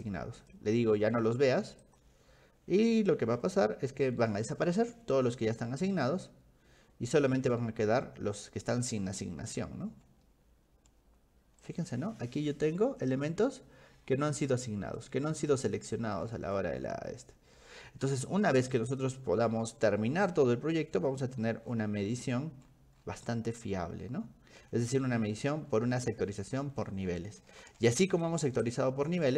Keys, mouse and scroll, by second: 0.4 click, 1.8 click, 8.6 middle click, 8.6 scroll, 9.6 middle click, 9.6 scroll, 10.2-11.7 shift+middle drag, 10.2 scroll, 11.9-13.1 scroll up 7, 12.9 middle click, 13.1 middle click, 14.0-14.3 scroll down 2, 14.5 middle click, 15.0-16.2 scroll up 6, 16.2-16.8 scroll down 6, 18.7 click, 18.9 click, 20.3-23.8 scroll down 20, 24.9-27.4 scroll up 17, 28.1 click, 28.2 scroll up 1, 28.6 ctrl+click.